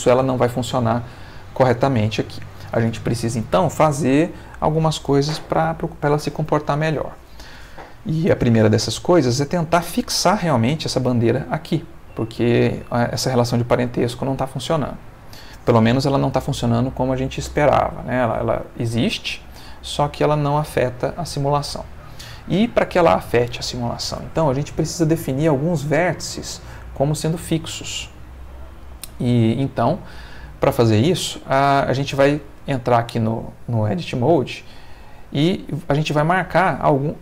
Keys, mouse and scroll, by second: 14.2-15.5 ctrl+middle drag, 18.6 click, 19.0 g, 19.7 Escape, 21.7 click, 32.5 Tab, 34.4 Tab, 35.8 click, 37.1 shift+click.